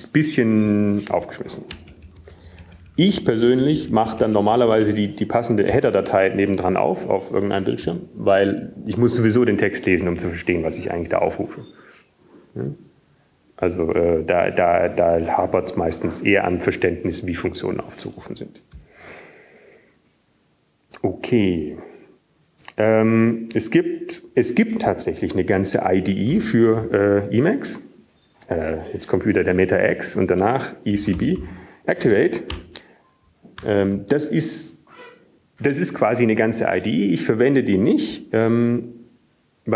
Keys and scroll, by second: 5.0-6.1 BackSpace, 6.4 BackSpace, 7.1 BackSpace, 7.4 BackSpace, 8.9 BackSpace, 31.1 alt+x, 34.7-35.9 typing, 36.7 Return.